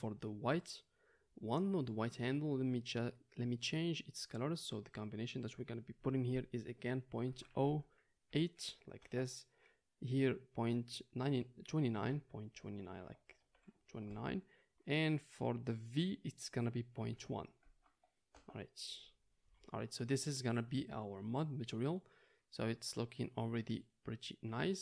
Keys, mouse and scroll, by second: 0.5-3.7 drag, 3.7-24.8 middle drag.